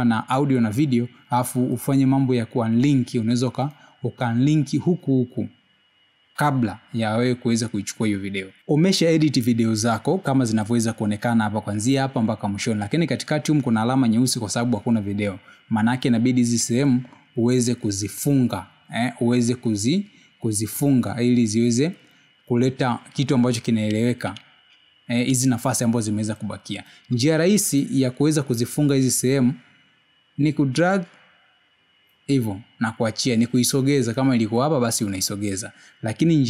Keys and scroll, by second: 27.1 space.